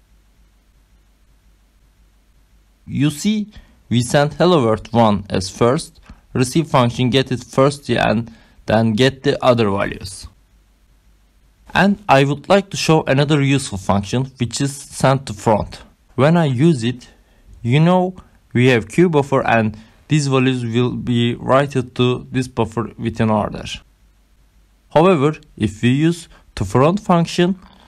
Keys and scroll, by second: 12.6 ctrl+c, 18.4 Left, 18.7-21.3 typing, 22.7 ctrl+s.